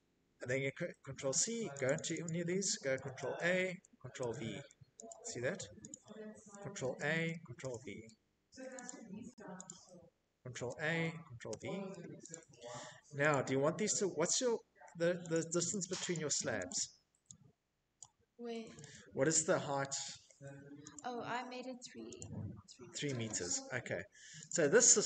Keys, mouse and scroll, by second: 0.1 click, 0.3 click, 0.4 click, 1.4-2.9 typing, 3.3 click, 4.1 click, 5.0 a, 6.3 middle click, 6.4 middle click, 6.4 v, 6.5 middle click, 7.1 click, 7.8 click, 8.8 a, 9.7 v, 10.5 click, 11.5 click, 13.5 click, 13.7 click, 13.9 click, 14.3 click, 14.9 click, 16.1 click, 17.0 v, 19.1 click, 20.3 click, 22.6 click.